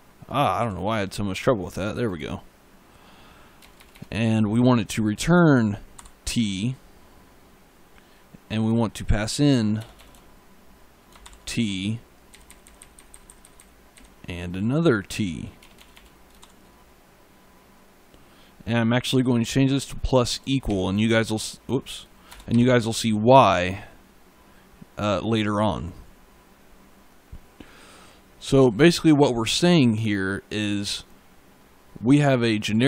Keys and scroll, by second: 0.4 e, 3.5 BackSpace, 5.8 shift+t, 9.6 BackSpace, 12.2 Right, 15.5 BackSpace, 16.2 shift+t, 20.5 shift+=, 22.1 BackSpace, 22.3 =.